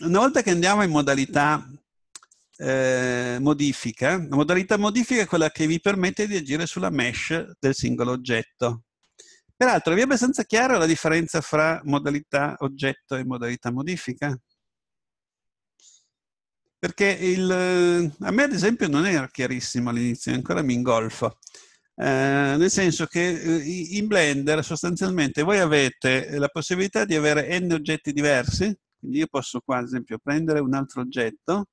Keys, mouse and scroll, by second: 0.1 scroll down 1, 0.3 middle click, 2.3 right click, 3.0 Tab, 22.7 Tab, 30.4 a.